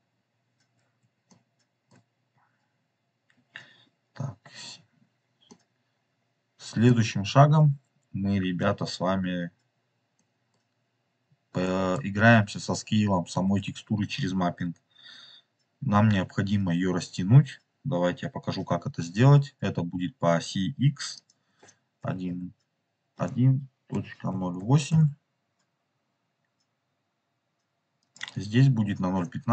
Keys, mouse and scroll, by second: 1.2 shift+middle click, 4.9 scroll up 2, 5.4-6.9 middle drag, 9.2 scroll down 2, 10.0 middle click, 10.9-11.5 scroll up 4, 11.5 middle click, 21.1-25.9 drag, 27.9-29.5 drag.